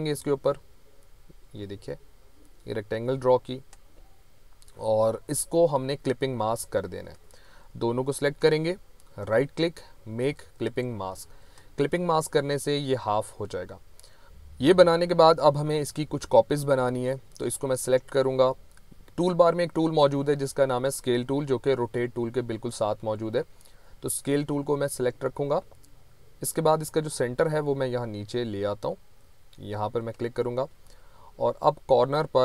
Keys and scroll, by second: 7.0 v.